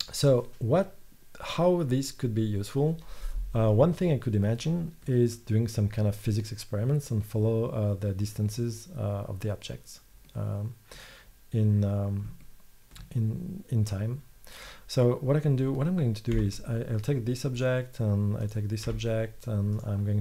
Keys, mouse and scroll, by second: 3.6 middle click, 4.2-4.8 scroll up 1, 16.4 g, 18.5 right click, 18.9 g, 19.3 right click, 19.7 right click.